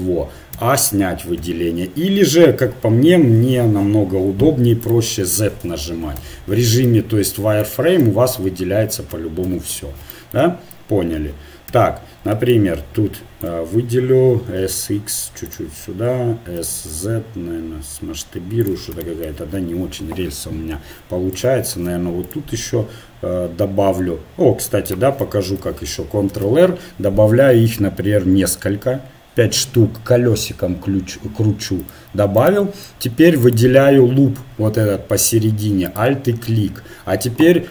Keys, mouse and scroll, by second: 0.5 a, 1.4 KP_1, 4.9-6.4 drag, 6.2 z, 6.8 click, 8.1 click, 9.4 KP_1, 11.7 a, 12.5-14.5 drag, 14.5 s, 16.6 s, 21.7 ctrl+r, 25.5 ctrl+z, 26.3 ctrl+r, 33.5-35.7 right drag, 35.8-37.7 right drag.